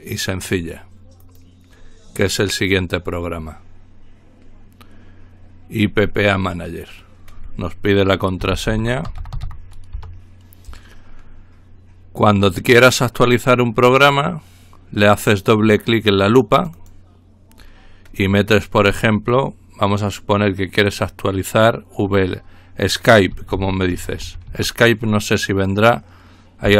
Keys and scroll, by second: 8.7-9.9 typing, 9.9 Return, 23.3-25.0 typing, 26.6 Return.